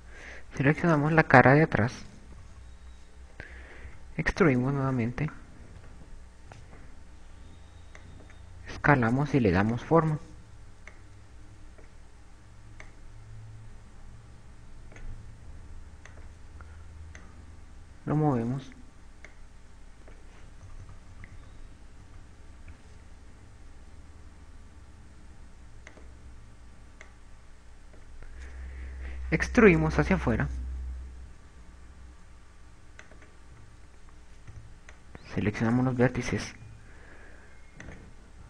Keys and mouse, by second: 0.0-1.3 typing, 2.5 right click, 3.3 KP_2, 3.9 KP_2, 4.9 e, 7.7 s, 9.6 click, 11.1 click, 14.3 click, 17.5 click, 18.5 click, 20.7 click, 21.9 KP_2, 22.0 KP_2, 22.6 KP_6, 22.7 KP_6, 27.3 click, 28.5 click, 30.7 e, 34.3 click, 34.9 a, 35.7 b, 38.1 a.